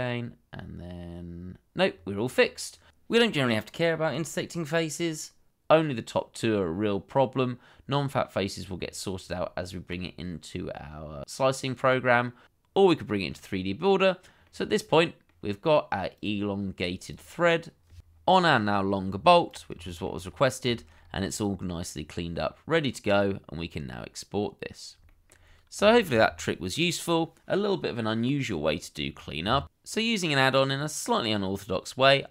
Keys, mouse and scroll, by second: 1.9-2.2 scroll down 1, 8.9-9.3 scroll down 1, 9.3 Tab, 13.1-14.0 scroll down 1, 14.5 middle click, 16.7-18.0 scroll up 1, 19.1-19.7 scroll down 1, 19.9 shift+middle click, 20.2-20.7 scroll up 1, 20.9-23.1 scroll up 1, 25.1 shift+middle click, 25.4-25.9 shift+scroll up 1, 25.9 shift+middle click, 26.0 shift+scroll up 1.